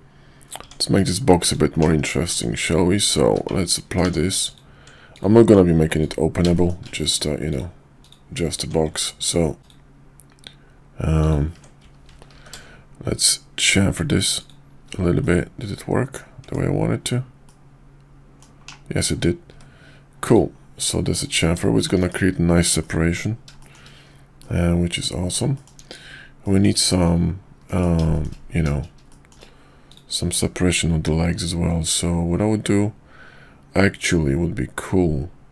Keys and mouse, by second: 0.6 Tab, 1.4 click, 1.8 /, 2.3 middle click, 3.0 Tab, 3.2 q, 4.0 Tab, 4.4 click, 5.1 click, 6.0 ctrl+click, 6.5 shift+middle click, 7.1 ctrl+click, 8.0 ctrl+click, 9.2 ctrl+click, 9.6 ctrl+click, 11.2 ctrl+click, 12.3 ctrl+b, 15.2 middle click, 16.4 Tab, 17.4-18.4 middle drag, 18.6 /, 20.2 click, 20.2 `, 20.9-21.4 middle drag, 21.7 shift+middle click, 22.0 KP_5, 22.8 middle click, 23.6 middle drag, 24.4-25.3 middle drag, 25.5 shift+middle click, 26.4 middle click, 27.6 KP_5, 28.1 shift+middle click, 29.1 shift+middle drag, 29.9-30.6 drag.